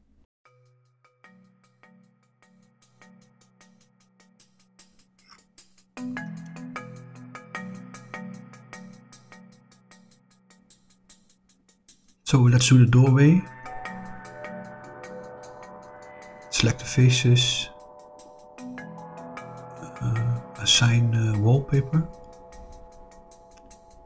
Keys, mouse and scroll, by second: 2.3 scroll down 4, 2.9 middle click, 4.1 click, 4.7-5.8 middle drag, 6.7 click, 7.6 click, 9.4-10.9 middle drag, 12.0 click, 13.1 shift+click, 13.8 middle click, 15.5 shift+click, 15.9 middle click, 17.0 shift+click, 17.6 middle click, 20.1 click, 21.8 click, 22.6 middle click, 23.8-24.0 middle drag.